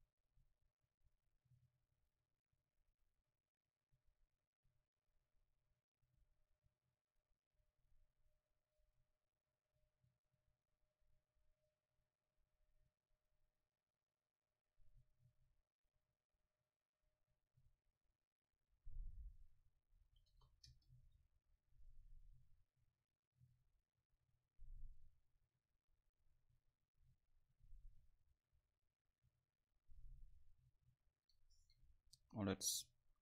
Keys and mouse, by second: 12.6-19.3 middle drag, 19.6-21.5 drag, 22.0 F12, 32.7 Escape.